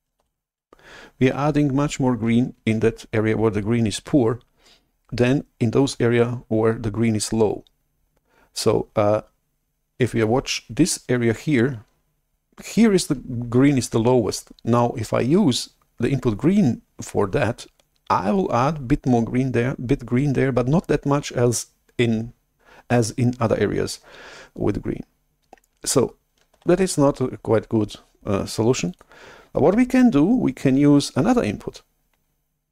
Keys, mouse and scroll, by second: 0.2 shift+super+F11, 26.5 shift+super+F11, 28.8-31.4 drag.